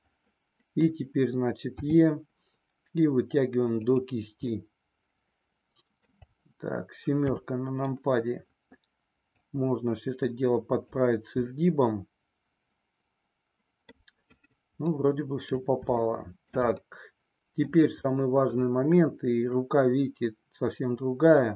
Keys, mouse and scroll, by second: 1.8 e, 3.8 click, 4.4-6.2 middle drag, 7.2 KP_7, 9.4-10.9 drag, 11.4-14.1 middle drag, 14.9 middle click, 16.1 scroll up 1, 16.2 shift+middle click, 16.9 middle click.